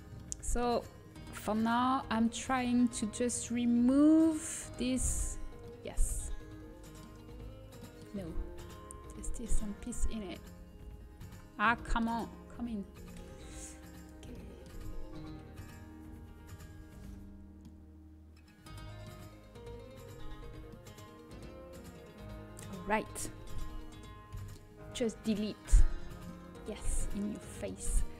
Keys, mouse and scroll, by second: 1.9 shift+l, 2.3 shift+l, 3.8-5.2 middle drag, 4.5 shift+l, 5.2 click, 9.6 shift+l, 10.0 shift+l, 10.3 shift+l, 10.6 shift+l, 11.3 middle click, 11.4-13.5 middle drag, 14.3 middle click, 16.3 shift+l, 16.5 shift+l, 20.3 h, 24.9 ctrl+z, 24.9 Delete, 26.2-28.1 middle drag.